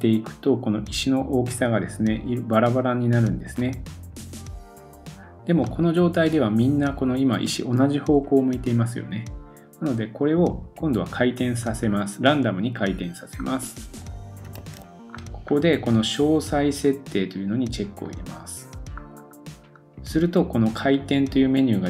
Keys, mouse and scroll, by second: 5.6 middle click, 8.5 middle click, 8.6-14.7 drag, 11.0-11.6 scroll up 1, 11.6-12.6 scroll up 2, 12.6-13.2 scroll up 1, 13.2-14.3 scroll up 1, 14.3-14.6 scroll up 4, 14.6 super+s, 15.1-16.4 scroll up 2, 16.4-17.7 scroll up 1, 18.1 click, 18.2-21.8 middle drag, 18.6-19.5 scroll down 5, 21.1-21.8 scroll down 3.